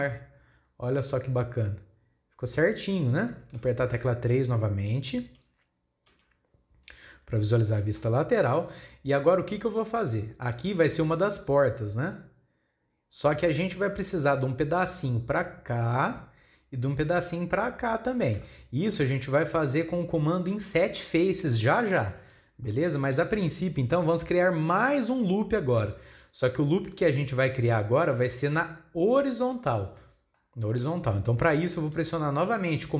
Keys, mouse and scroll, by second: 0.0-3.0 middle drag, 6.1 KP_3, 7.4-8.0 scroll up 1, 8.0 shift+middle click, 8.8 scroll up 1, 10.7-18.4 drag, 18.4-21.4 shift+middle drag, 22.6-25.8 shift+middle drag, 30.3-32.9 shift+middle drag.